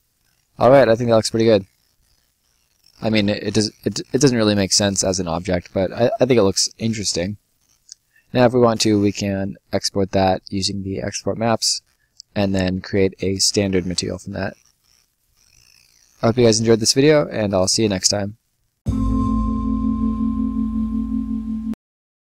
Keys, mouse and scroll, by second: 0.0 right click, 0.5 scroll up 1, 0.7 right click, 6.3 right click, 8.6 click, 13.5 scroll up 1, 13.7 middle click, 14.1 right click.